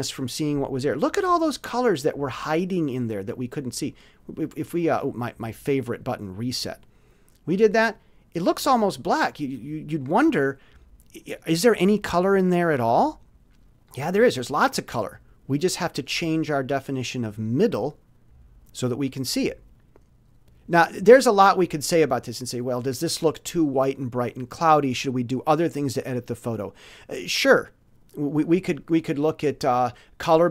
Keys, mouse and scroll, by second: 3.8 click, 6.3 click, 15.7-17.8 drag, 29.1 click.